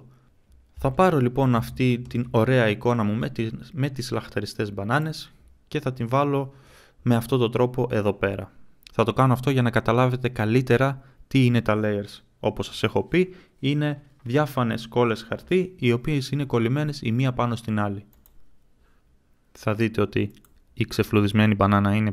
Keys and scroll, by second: 0.3 ctrl+z.